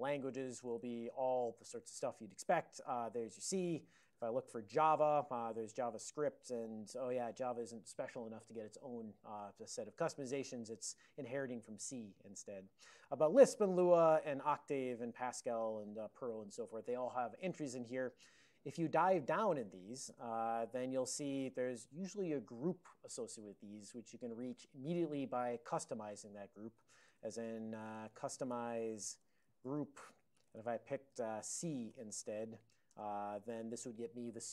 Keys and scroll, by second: 0.9 alt+<, 1.5 ctrl+n, 1.9 ctrl+s, 2.4 typing, 3.0 ctrl+s, 3.4 ctrl+s, 3.7 ctrl+a, 3.8-5.1 typing, 5.8 ctrl+a, 6.3 ctrl+s, 10.4 ctrl+a, 12.9 ctrl+n, 13.1 ctrl+n, 13.6 ctrl+n, 13.8 ctrl+n, 14.6 ctrl+n, 15.9 ctrl+n, 17.8 ctrl+p, 18.4 ctrl+p, 18.7-20.1 ctrl+p, 20.1 Return, 21.5 ctrl+a, 22.0 ctrl+p, 27.1-32.0 typing, 31.2 Return, 32.0 Tab, 33.0 Return.